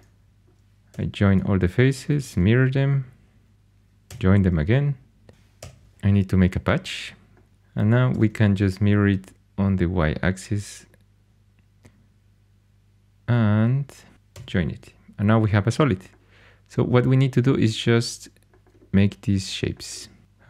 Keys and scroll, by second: 0.8 j, 2.0 alt+x, 2.2 alt+x, 3.8-4.7 typing, 5.5 shift+super+p, 8.0 alt+x, 8.1 alt+x, 14.3 j.